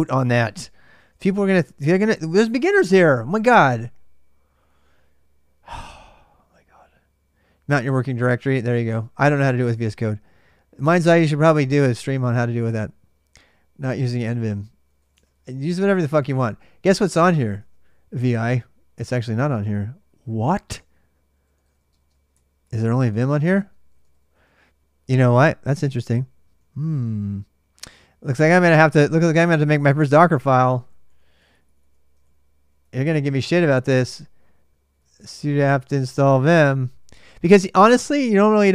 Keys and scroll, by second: 0.5-1.7 typing, 14.9-17.7 typing, 20.9-25.9 typing, 27.9-29.3 typing, 30.4-33.1 typing, 34.5-36.9 typing.